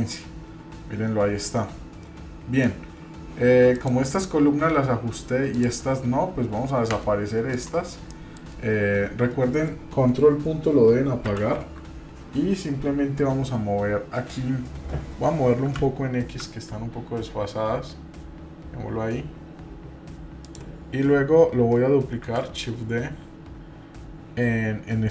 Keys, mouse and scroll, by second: 3.7 click, 5.5 click, 6.9 Delete, 7.5 click, 8.1 middle click, 11.2 ctrl+., 22.2 shift+d.